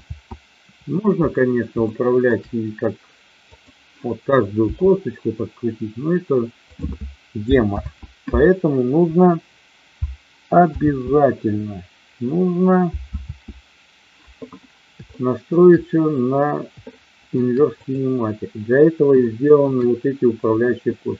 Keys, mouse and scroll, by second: 1.9-2.3 shift+middle drag, 4.6 r, 7.7 ctrl+z, 10.6 ctrl+z, 13.1 ctrl+z, 15.1-15.4 shift+middle drag, 16.9-17.3 shift+middle drag, 19.2-19.6 shift+middle drag.